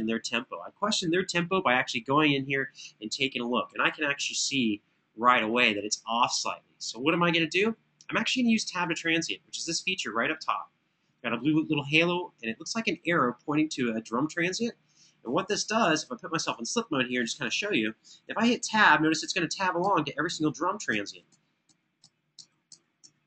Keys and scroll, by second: 3.3 super+], 3.4 super+], 18.8 Tab, 19.6 Tab, 20.1 Tab, 20.6 Tab, 21.5 Tab, 22.1 Tab, 22.7 Tab.